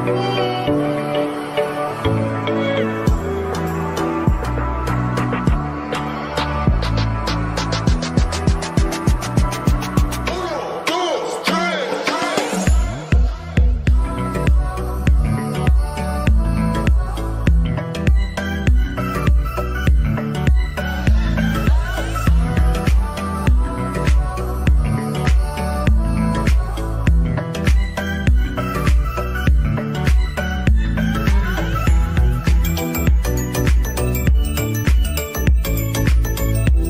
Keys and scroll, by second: 11.3 g, 23.7 ctrl+z, 35.0 g.